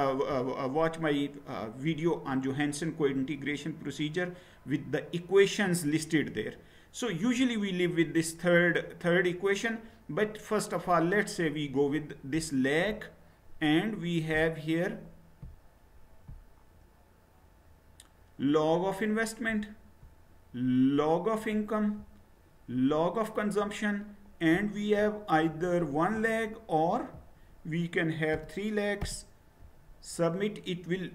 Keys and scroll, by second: 28.3 BackSpace, 29.0 1.